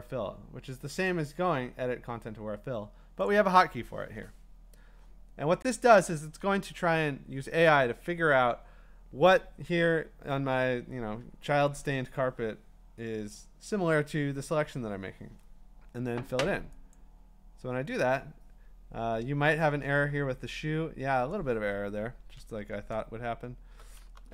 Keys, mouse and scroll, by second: 1.1 click, 3.3 click, 4.5-6.4 drag, 16.9-20.1 drag, 22.0 click, 22.5 ctrl+d, 23.0-23.7 scroll, 24.1 b.